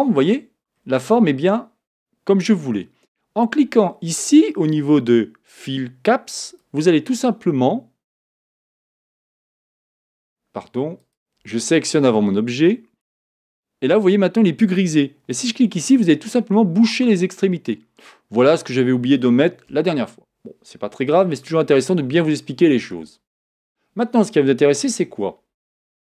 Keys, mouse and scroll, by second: 6.5-9.5 drag, 9.6 click, 11.0 click, 15.3 click, 15.9-17.6 middle drag, 17.4-18.0 scroll down 4, 18.0 middle click, 18.9-19.7 scroll up 1, 19.7 KP_7, 21.4-25.7 shift+middle drag, 25.7 Tab.